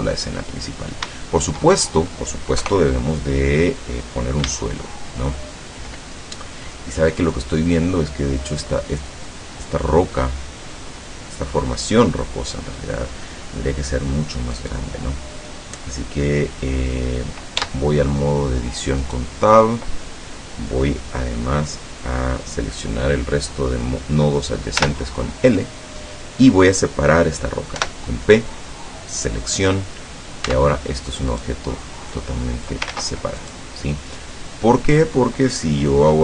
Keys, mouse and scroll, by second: 0.7-1.1 scroll down 2, 1.2-2.3 shift+drag, 2.6 KP_0, 14.6 right click, 16.7 scroll up 1, 17.6 Tab, 19.0 right click, 24.8 l, 27.9 p, 29.3 click, 30.6 Tab, 31.4 right click, 32.2 click, 33.0 ctrl+z, 33.5 ctrl+right click, 34.1 scroll down 2.